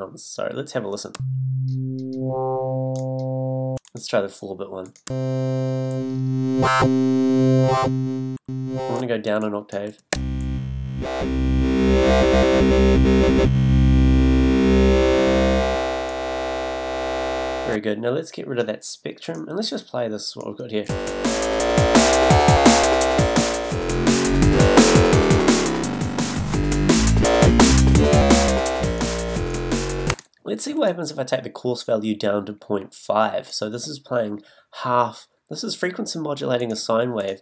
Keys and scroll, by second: 1.1 a, 5.0 a, 8.4 a, 9.9 z, 20.9 space, 30.1 space.